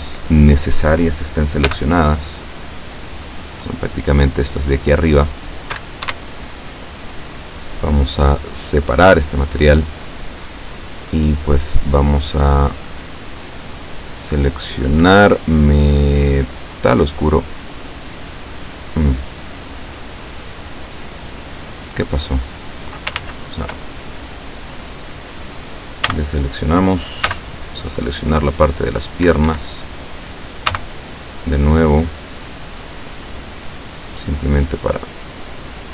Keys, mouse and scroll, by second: 1.7 c, 2.3-5.5 drag, 6.1 Escape, 8.9 click, 13.8 click, 16.7 click, 21.6-22.0 scroll down 1, 22.6 scroll up 1, 23.2 ctrl+z, 26.0 a, 27.2 c, 28.2 scroll down 2, 29.1 scroll up 2, 29.4 Escape, 29.7 scroll down 2, 30.7 c, 30.9-35.9 drag.